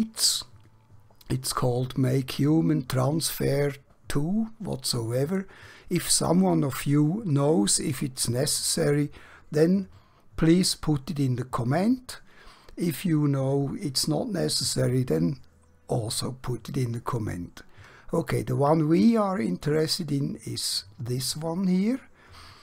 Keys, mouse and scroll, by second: 5.4 click, 18.9 click, 20.5-21.5 scroll down 1.